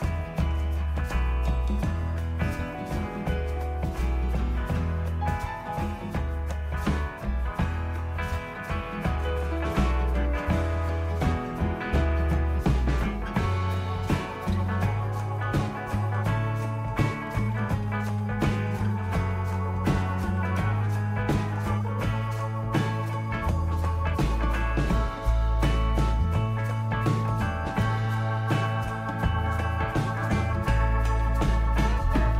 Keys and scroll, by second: 0.0-0.3 typing, 0.3 Return, 17.4-21.9 typing, 24.2-25.5 BackSpace, 29.6 typing, 30.8-32.3 typing.